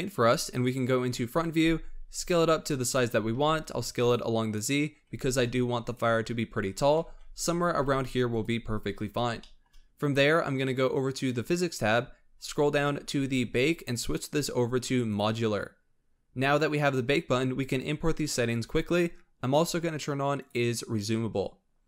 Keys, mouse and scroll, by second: 0.9 KP_1, 1.9 s, 3.1 s, 4.4-4.9 scroll down 3, 4.9 g, 6.6 s, 7.6 g, 8.8-9.3 scroll up 2, 9.3-10.9 shift+middle drag, 10.9 click, 12.2-13.2 scroll down 18, 14.0-16.3 drag, 16.3 scroll up 5, 18.1-18.8 scroll down 7, 20.3 click.